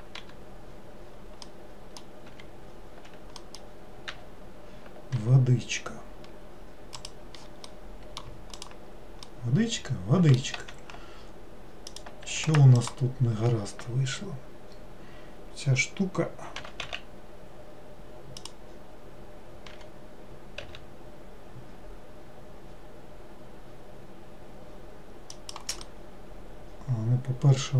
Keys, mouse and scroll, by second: 0.3 g, 1.6 middle click, 2.4 g, 3.5 middle click, 4.2 a, 7.8 middle click, 8.7 click, 9.4-10.7 middle drag, 10.7 2, 12.0 click, 12.6 alt+click, 12.9 alt+click, 26.0-27.7 middle drag.